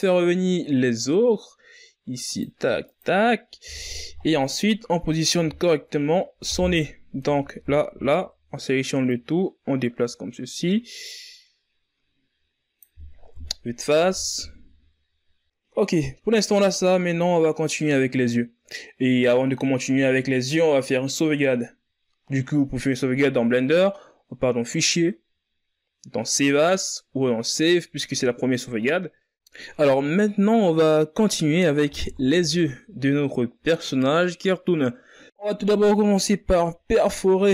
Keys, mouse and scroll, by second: 1.2 middle click, 2.0 right click, 2.8 KP_3, 3.7-4.2 scroll up 5, 4.2 Tab, 4.6 a, 4.8 a, 6.0-9.1 drag, 10.3 KP_1, 10.9 Tab, 11.3 a, 11.5-12.4 scroll down 4, 12.4 scroll down 2, 13.8-17.0 scroll up 4, 21.6-24.8 drag, 32.2-32.9 ctrl+scroll up 2, 32.9 z, 33.6-34.7 shift+scroll up 6, 34.7 z, 35.4-35.9 shift+scroll up 4, 35.9 right click, 36.6 Tab.